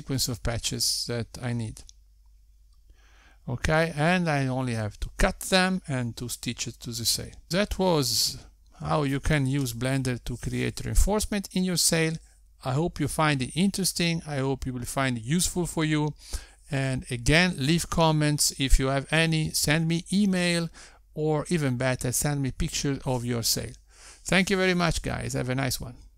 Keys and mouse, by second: 6.0 Tab.